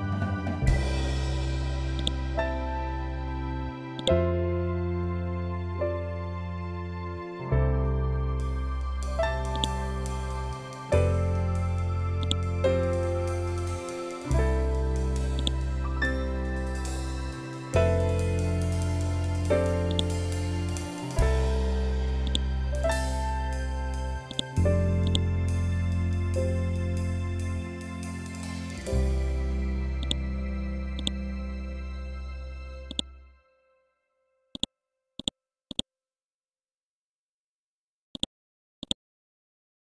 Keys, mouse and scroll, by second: 1.4-3.4 drag, 3.4-7.8 ctrl+drag, 9.0 click, 11.7 click, 14.8 click, 19.4 click, 21.7 click, 29.5 click, 34.0 right click, 34.7 click, 37.6 right click, 38.3 click.